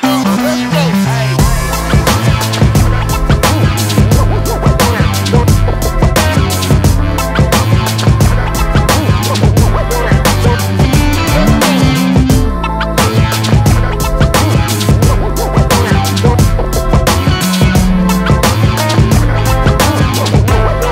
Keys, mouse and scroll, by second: 6.0 scroll down 4, 6.9 scroll down 1, 7.1 click, 9.1-9.8 scroll up 2, 10.9 click, 17.1 click.